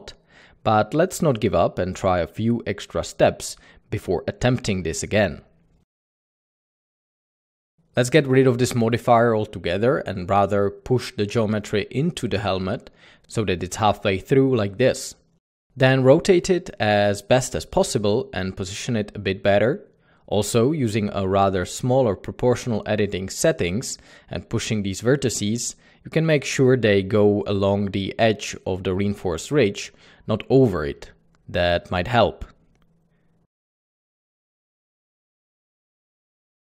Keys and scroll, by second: 7.9 typing, 11.0 typing, 12.3-13.4 typing, 14.5-16.4 typing, 17.7-18.4 typing, 19.9 typing, 21.2-21.8 typing, 23.1 Tab, 23.2 typing, 23.5 Escape, 25.6 Escape, 27.1 typing, 28.4 typing, 29.8 Tab, 29.8-30.4 typing, 30.0 Tab, 32.1-34.6 typing.